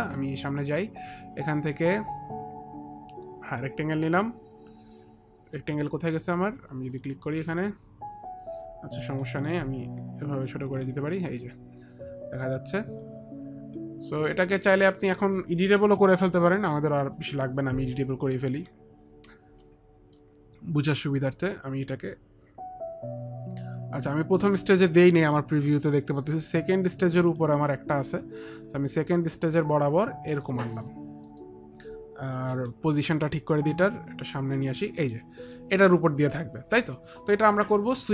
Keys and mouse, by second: 0.2 middle click, 0.6 middle click, 2.1 click, 7.0 click, 9.3 click, 9.3 t, 10.2 click, 13.2 click, 13.2 t, 19.7 alt+c, 19.7 alt+middle click, 21.2 click, 23.9 click, 28.2 click, 30.9 middle click, 31.4 middle click, 32.6 middle click, 32.6 e, 33.7 click, 33.7 middle click, 33.7 e, 35.6 click, 35.6 e.